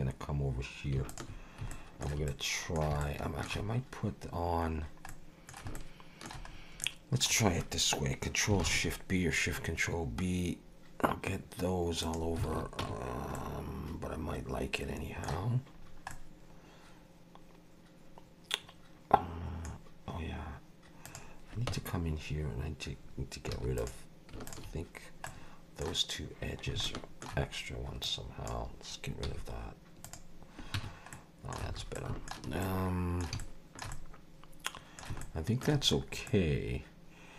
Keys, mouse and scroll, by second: 1.1 shift+click, 1.7 shift+middle click, 2.3 middle click, 3.0 shift+middle click, 4.7-5.1 scroll down 2, 5.1 middle click, 5.7 shift+middle click, 6.5 scroll up 2, 6.8 middle click, 8.7 ctrl+shift+b, 12.5 alt+a, 12.8 Tab, 13.3 middle click, 15.8 scroll down 2, 16.1 middle click, 19.8-21.0 scroll down 1, 21.0 click, 21.7 Tab, 23.5 2, 23.8 click, 24.5 shift+click, 25.3 middle click, 26.8 shift+middle click, 28.0 click, 29.3 x, 30.8 Tab, 31.1 middle click, 31.7 alt+a, 31.9 middle click, 32.6 middle click, 33.4 shift+middle click, 33.9 middle click, 35.2 shift+middle click, 36.0 scroll up 1, 36.3 middle click.